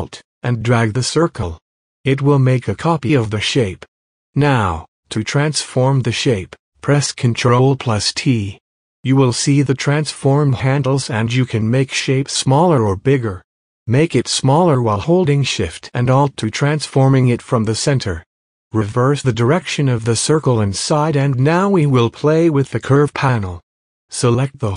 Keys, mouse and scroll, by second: 20.7 right click, 22.9 click, 23.8 space, 24.1 click, 24.3 click, 24.3 space.